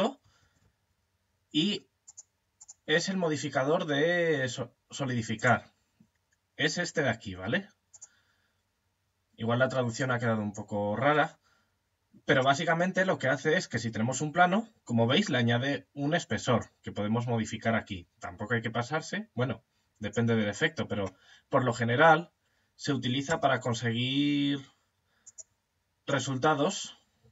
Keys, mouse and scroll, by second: 3.0-4.7 middle drag, 4.7 click, 9.4 click, 12.1-16.0 middle drag, 16.0 click, 19.9-22.7 middle drag, 22.7 Tab, 24.7-26.7 drag, 25.5 right click, 26.7-27.3 middle drag, 27.0 right click.